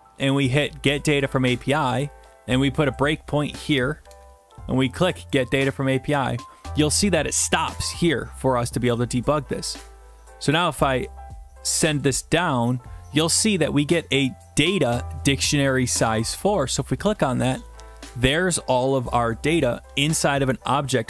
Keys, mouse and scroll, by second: 3.0 click, 4.1 alt+Tab, 5.4 click, 8.8-9.8 scroll, 12.0 click, 16.4 click, 17.1 scroll down 1, 17.2 scroll, 17.4-17.9 scroll down 2, 17.9 middle click.